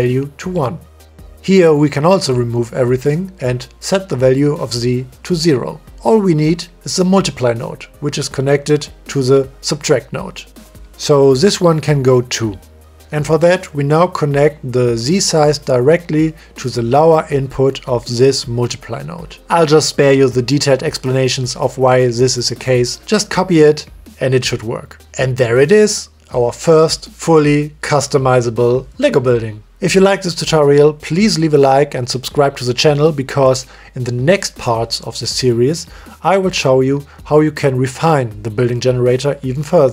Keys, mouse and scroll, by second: 0.2 click, 1.3 middle click, 3.0 click, 3.7 Delete, 5.0 click, 5.7 ctrl+z, 11.2 click, 12.6 Delete, 16.7 middle click, 18.9 click, 19.0-20.1 middle drag, 21.1-21.5 shift+middle drag, 21.7-22.5 middle drag, 23.3 click, 23.5-25.4 drag, 23.8 o, 24.3 l, 25.5-27.0 drag, 26.3 o, 27.1 middle click, 27.5 middle click, 27.9 middle click, 29.4-30.9 middle drag, 31.9 shift+middle click, 32.2 middle click, 33.6-35.0 drag, 35.4 shift+middle drag, 36.1 shift+middle click, 36.5-37.3 middle drag, 38.3-38.8 middle drag.